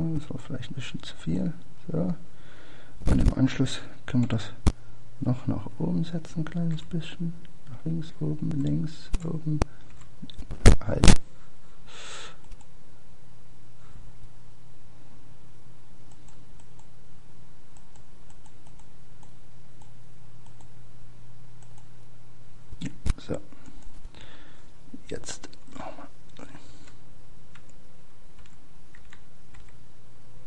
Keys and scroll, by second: 10.3 Up, 13.5 Left, 16.7 Up, 16.7 Left.